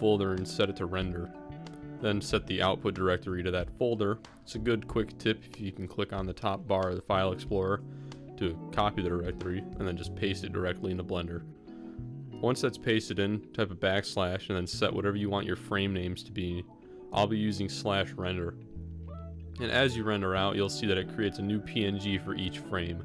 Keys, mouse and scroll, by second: 8.6-14.7 ctrl+drag, 13.8 BackSpace, 16.1 ctrl+s.